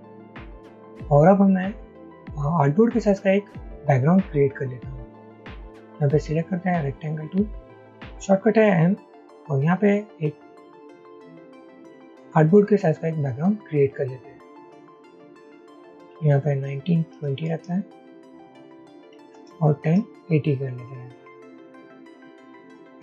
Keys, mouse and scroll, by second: 15.2 double click, 16.1-17.7 typing, 18.9 double click, 19.0-20.5 typing, 22.2 double click.